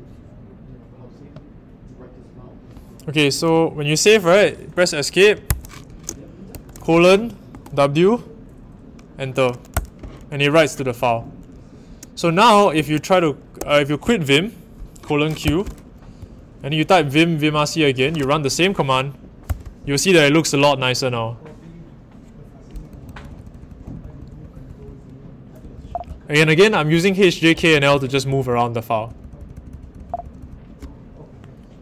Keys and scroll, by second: 5.4 ⟲, 7.5 shift+w, 9.7 Return, 13.6 a, 15.4 Return, 16.2 Page_Up, 19.4 Return, 22.9-30.3 typing.